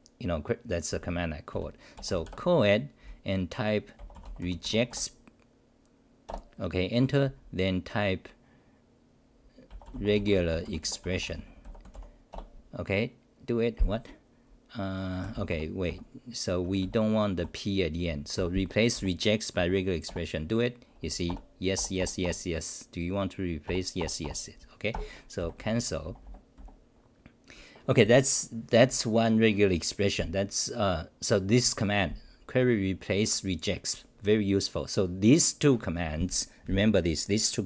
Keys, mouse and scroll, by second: 6.2 Return, 12.3 Return, 15.8 Up, 16.7 Home, 16.8 r, 17.4 e, 18.4 g, 18.9 r, 20.0 Return, 24.9 ctrl+g, 25.4 f.